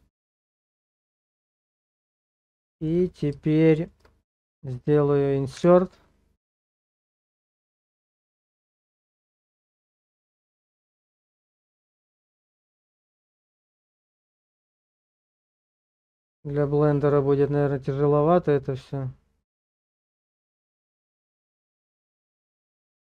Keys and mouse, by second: 1.3 shift+click, 2.0 click, 2.5 shift+click, 3.1 click, 3.5 shift+click.